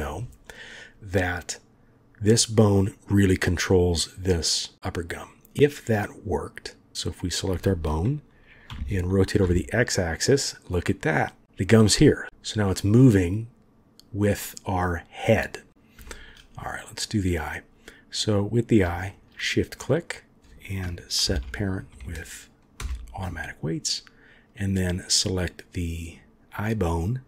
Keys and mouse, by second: 5.1-5.7 drag, 6.7 click, 8.7 r, 12.2 r, 16.0 shift+middle drag, 16.9 click, 18.2-18.8 drag, 21.2 ctrl+p, 24.6 click.